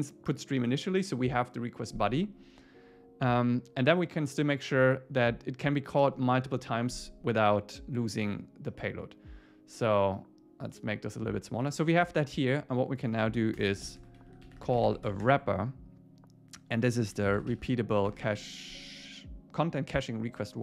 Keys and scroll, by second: 13.6 Return, 18.1 Tab.